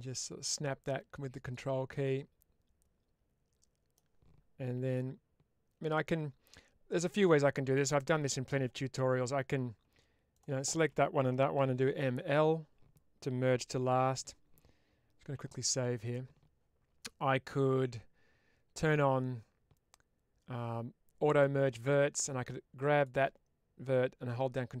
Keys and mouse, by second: 1.2 click, 1.7-3.8 middle drag, 4.6 1, 7.0 middle click, 10.2 shift+click, 11.4 m, 13.7 ctrl+z, 21.2 click, 22.8 click, 23.8-24.8 drag.